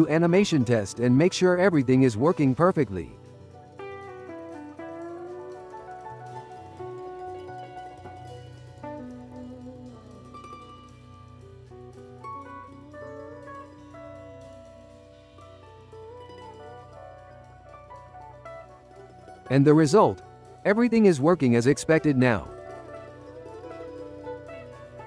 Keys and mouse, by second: 0.4 click, 1.1 shift+middle click, 1.5 i, 2.0 click, 2.5 i, 2.8 click, 3.6 g, 4.8 click, 5.7 i, 6.0-6.6 drag, 6.6 g, 7.6 click, 8.2 i, 8.6 click, 8.8 i, 9.3 click, 9.9 i, 10.4 click, 11.6 i, 12.2 click, 13.9 g, 15.0-15.8 drag, 15.8 ctrl+c, 16.0 ctrl+v, 16.4-18.0 drag, 18.0 g, 19.5-20.8 drag, 20.8 space, 22.6 space.